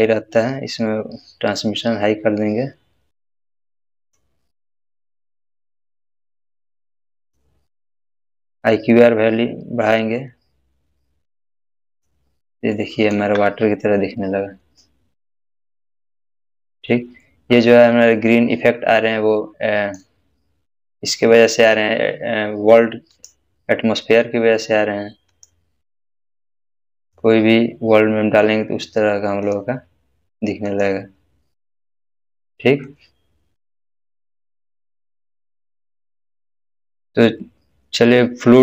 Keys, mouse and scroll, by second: 12.7-13.3 middle click, 13.2 space, 15.4-16.3 middle drag, 19.3-20.2 middle drag, 23.1 click, 25.3 click, 29.4 click, 32.8-34.4 middle drag, 36.6 scroll down 1.